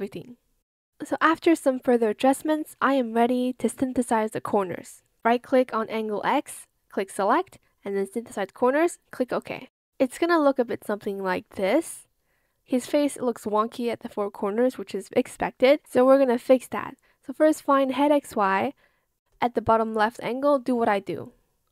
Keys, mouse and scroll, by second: 2.1 ctrl+z, 3.2 shift+click, 18.6 shift+click, 19.8 shift+click, 20.8 shift+click.